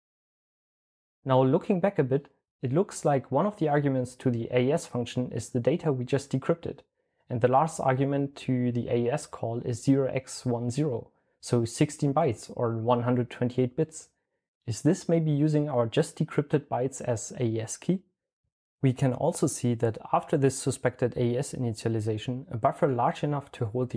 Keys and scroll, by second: 0.0 Tab, 0.1 Return, 1.7-8.0 typing, 15.7-18.2 typing, 22.8-23.9 typing.